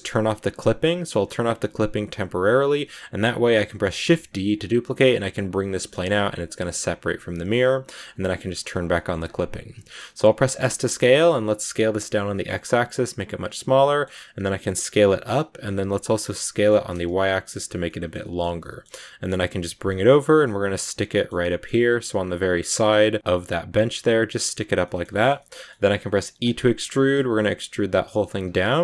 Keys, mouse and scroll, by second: 1.1 click, 3.9 shift+d, 5.5 scroll down 2, 7.3-8.5 scroll down 1, 8.5 click, 8.8 shift+middle click, 9.1-10.4 scroll up 1, 10.4 s, 13.4 middle click, 14.2-14.5 scroll up 1, 14.5 s, 15.5 s, 17.7-19.4 middle drag, 19.4 g, 20.4 middle click, 21.2 scroll down 1, 21.4 middle click, 21.7 g, 22.2 middle click, 22.9 g, 24.7-26.3 shift+middle drag, 26.3 e, 28.5-28.8 middle drag.